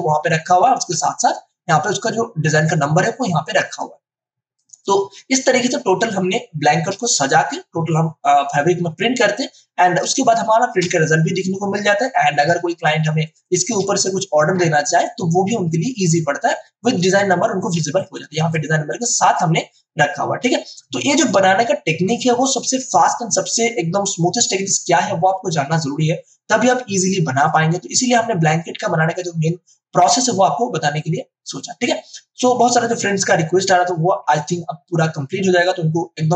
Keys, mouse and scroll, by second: 1.1 space, 3.6-10.1 ctrl+alt+drag, 10.0 space, 10.3 click, 10.5 space, 12.9 space, 13.2 ctrl+click, 17.7 space, 17.9 ctrl+click.